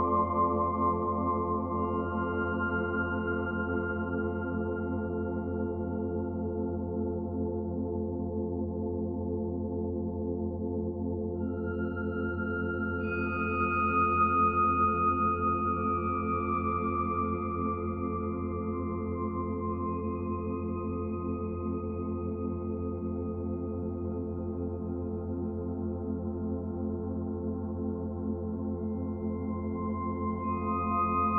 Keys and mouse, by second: 0.0-3.1 drag, 3.7-4.9 drag, 5.5 click, 7.3-8.4 ctrl+alt+drag, 9.0 shift+s, 10.2 shift+s, 11.0 click, 12.3 ctrl+s, 13.1 ctrl+click, 15.3 click, 16.6 click, 18.0 click, 20.6 click, 22.7 click, 23.7 shift+click, 24.7-25.7 typing, 25.9 Return, 29.0 click, 29.8 click, 30.8 5, 31.1 Return.